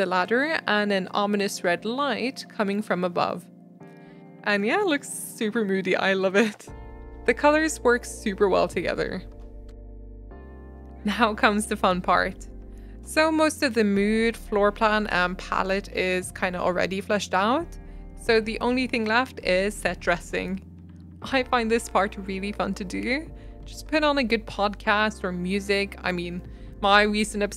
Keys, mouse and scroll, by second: 0.1 click, 1.6 KP_0, 1.8 click, 4.8 click, 5.5 click, 7.1 click, 9.4 click, 10.1 click, 10.3 scroll down 7, 10.4 click, 10.5 middle click, 10.7 g, 10.9 scroll up 6, 11.0 middle click, 11.2 s, 11.5-12.4 middle drag, 12.4 s, 12.9 g, 13.4 middle click, 13.8 scroll up 1, 13.8 middle click, 13.9 scroll down 1, 14.1 middle click, 14.5 r, 15.4 middle click, 15.8 g, 16.4 g, 16.9 g, 17.2 middle click, 17.4-18.2 scroll up 3, 17.6 click, 17.9 shift+middle click, 18.2 shift+middle click, 18.5 r, 19.7 g, 20.1 shift+middle click, 20.4 scroll up 2, 20.5 shift+middle click, 20.7 middle click, 20.8 scroll down 1, 20.9 middle click, 21.0 g, 21.8 middle click, 22.0 s, 22.5 g, 23.1 shift+middle click, 23.7 g, 24.6-24.9 middle drag, 24.9 scroll up 1, 25.0 middle click, 25.1 scroll down 1, 25.2-25.7 shift+middle drag, 25.7 g, 26.1 g, 26.7 g, 26.9-27.3 middle drag.